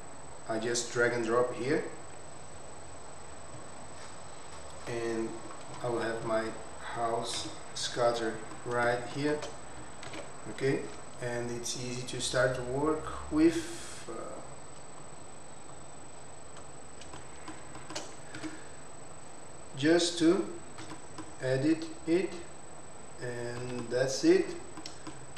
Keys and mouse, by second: 7.3 KP_Decimal, 8.5-8.8 middle drag, 9.1 shift+middle drag, 10.9 ctrl+z, 11.9 click, 13.0-13.5 drag, 14.4 click, 15.0 click, 15.9 drag, 16.5 click, 17.1-17.5 middle drag, 17.7 shift+middle drag, 18.8 Tab, 19.1 click, 20.8 e, 20.9 middle click, 21.7 click, 22.5 click, 23.6 e, 24.4 click, 24.7 middle click.